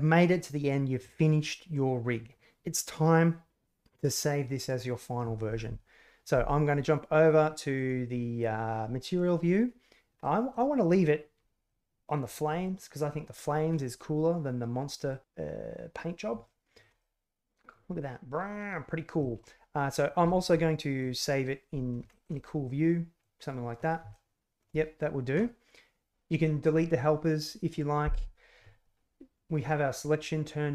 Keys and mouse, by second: 8.0 click, 10.2 middle click, 13.7-15.1 middle drag, 16.4 shift+click, 17.0-17.7 drag, 17.8 middle click, 19.2 shift+click, 19.4 click, 20.3 shift+middle click, 22.1 shift+middle click, 22.3-23.1 middle drag, 23.1 click, 24.1-24.6 shift+middle drag.